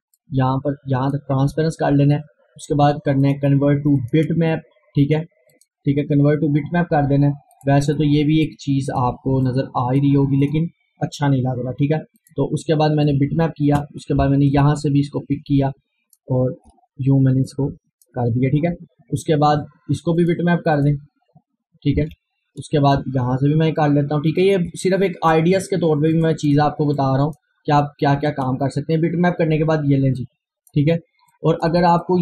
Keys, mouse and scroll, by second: 0.2-17.5 drag, 17.5-20.2 drag, 20.2 click, 22.0 Return, 22.9-26.1 drag, 26.1-31.3 drag, 31.3-32.2 drag.